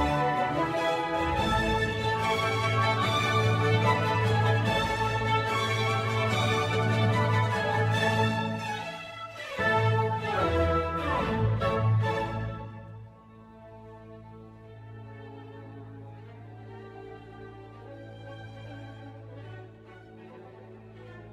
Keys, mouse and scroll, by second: 3.0 shift+click, 4.2 g, 5.5 click, 5.9 g, 7.1-8.2 scroll down 2, 8.2 scroll down 1, 8.5 click, 9.3 click, 10.4 shift+click, 12.3 ctrl+p, 13.3 click, 13.7 click, 14.1 g, 16.5-19.4 middle drag, 19.4 click, 20.5 h, 21.2 click.